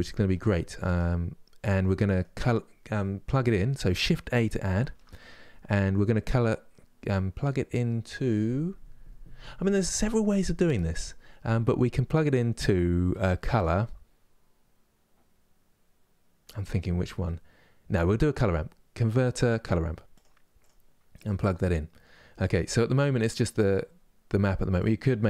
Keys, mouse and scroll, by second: 24.6-25.2 drag.